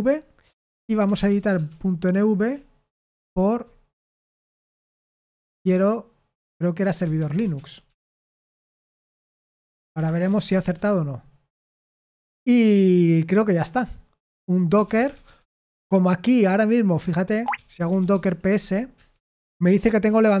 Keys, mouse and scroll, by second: 0.7-1.8 typing, 8.5-11.0 typing, 17.1-19.0 typing.